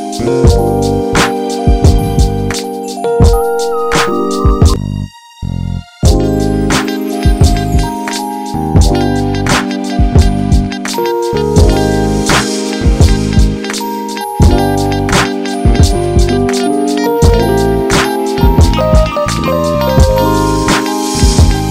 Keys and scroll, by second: 0.1 Return, 5.6 ctrl+c, 8.1 ctrl+v, 8.8 ctrl+z, 10.1 ctrl+v, 11.0 ctrl+d, 16.8 ctrl+j, 19.1 t.